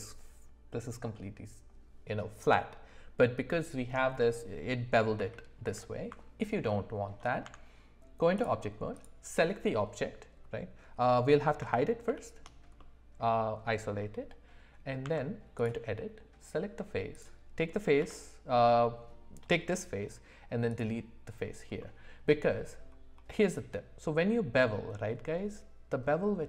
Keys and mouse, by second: 5.2 ctrl+z, 5.6 ctrl+z, 6.6 middle click, 7.4 Tab, 12.1 shift+h, 12.8 middle click, 15.0 Tab, 18.0 x, 21.8 middle click.